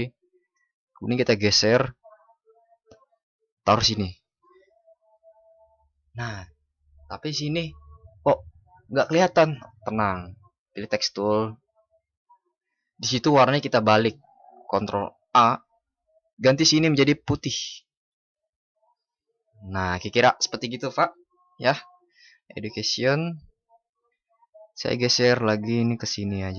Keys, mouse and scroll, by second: 14.1 ctrl+shift+@.